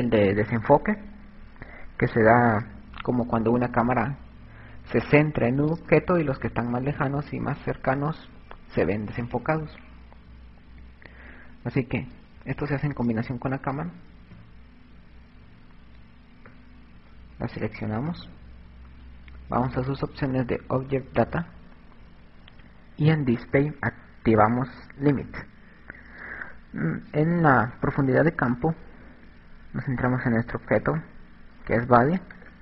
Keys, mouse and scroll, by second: 11.7 click, 13.2 KP_7, 15.2 KP_Subtract, 17.8 right click, 21.0 click, 25.3 click, 27.8 click.